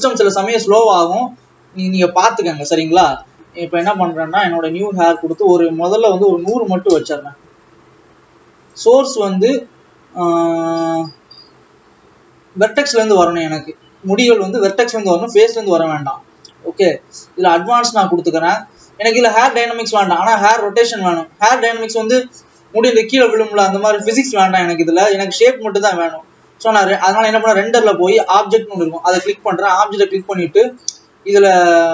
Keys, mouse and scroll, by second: 2.0-3.0 scroll down 3, 7.0 KP_0, 12.8-17.8 drag, 20.0 click, 29.3-31.9 drag.